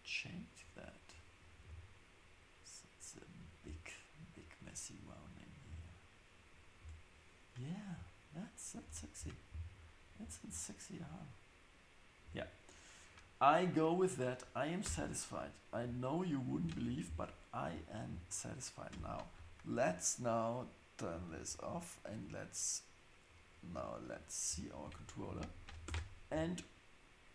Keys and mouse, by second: 12.2 Tab, 14.8 Tab, 21.1 click, 24.1 click, 25.3 shift+Left, 25.9 space.